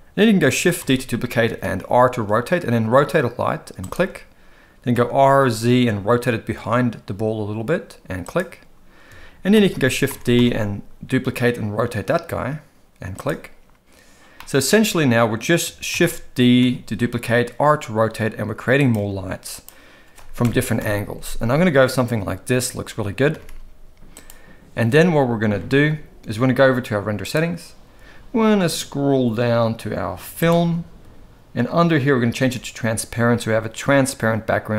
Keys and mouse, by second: 0.8 shift+d, 4.9 r, 9.5 shift+d, 14.3 middle click, 15.9 shift+d, 19.1 g, 20.8 KP_0, 23.3 r, 30.4 click, 32.3 click.